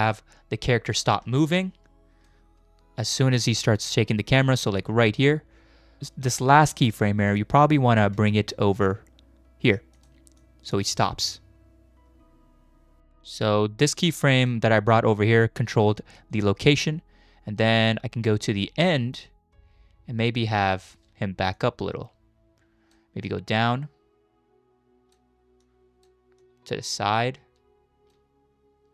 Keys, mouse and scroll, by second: 4.3 click, 6.2 click, 6.4 click, 10.0 g, 10.4-10.8 drag, 10.9 space, 13.0 click, 15.9 shift+middle click, 17.8-20.8 drag, 21.5-22.9 shift+drag, 23.3-25.2 shift+drag, 25.6 shift+click, 26.4-28.2 shift+drag.